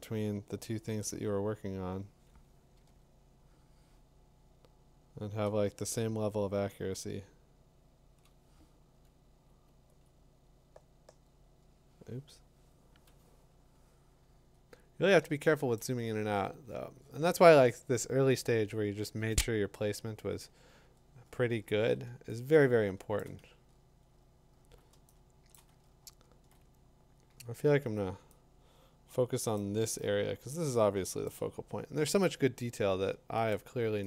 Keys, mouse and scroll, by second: 1.8-3.0 drag, 3.7 Tab, 8.1 click, 10.1 click, 10.8 -, 14.5 middle click, 14.6 middle click, 15.8 click, 16.0-16.4 scroll, 17.0 scroll, 17.8 scroll, 20.8-21.7 scroll, 22.9-23.8 scroll, 23.2 click, 23.4 t, 24.1 scroll down 1, 24.2-25.0 scroll down 5, 25.5 click, 25.7 t, 25.8 scroll up 2, 26.1 scroll, 27.3 scroll, 29.5-31.2 click, 30.4 click, 30.4 click, 31.2 click, 33.5 click, 33.8 click, 34.0 click.